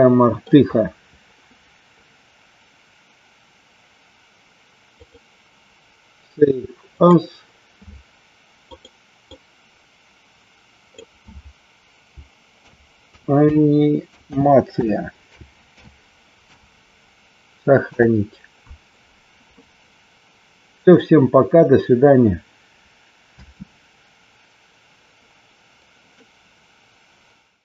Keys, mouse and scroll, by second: 5.2-7.6 drag, 23.6 space, 26.3-27.6 middle drag.